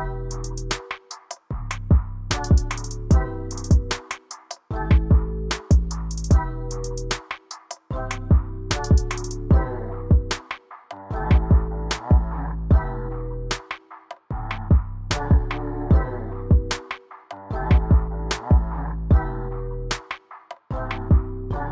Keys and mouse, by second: 2.3 click, 7.5-9.2 drag, 14.1 click, 19.8-21.7 drag.